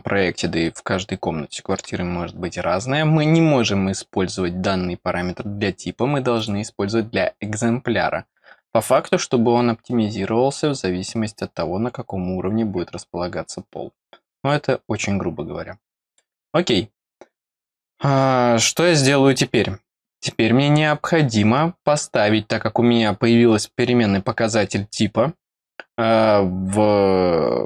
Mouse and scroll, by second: 6.3 click, 16.0 click, 22.4 scroll up 2.